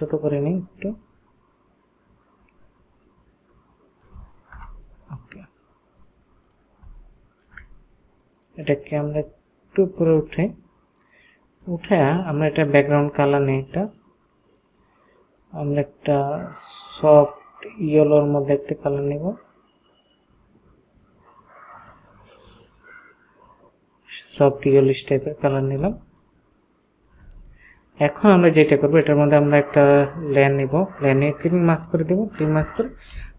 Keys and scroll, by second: 4.6 Return, 25.8 ctrl+space.